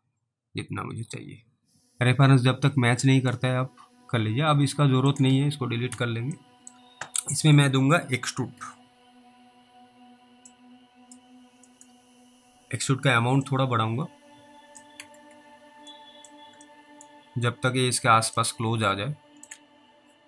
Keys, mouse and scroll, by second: 3.8 scroll up 2, 5.1 click, 5.9 Delete, 6.7 middle click, 7.6 click, 8.6 e, 10.8 click, 11.8 middle click, 13.8 click, 15.0 alt+w, 15.3 alt+w, 16.2 middle click, 16.2 scroll up 1, 17.0 alt+middle click, 17.2 scroll up 1, 18.7 alt+middle click.